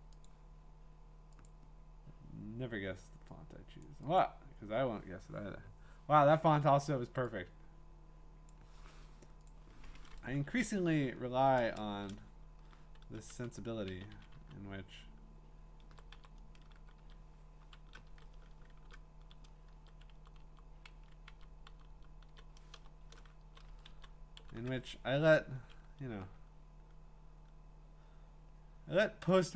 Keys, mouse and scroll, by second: 0.2 click, 1.5 click, 3.8 click, 4.2 click, 8.5-9.5 drag, 10.3 Down, 11.7 Up, 11.9 Left, 13.1 Down, 13.9 Down, 14.1 Down, 14.3 Down, 15.9 ctrl+Right, 16.1 ctrl+Right, 16.7 Up, 17.0 shift+Right, 18.1 Right, 18.7 Up, 18.7 typing, 19.7 Up, 20.1 Left, 20.4 Left, 20.9 Down, 21.3 Down, 21.7 Up, 21.7 Right, 21.7 Left, 21.7 !, 21.9 Left, 22.3 Right, 22.8 BackSpace, 23.4 Right, 27.4 Up, 27.4 Right, 27.4 Left, 29.3 click.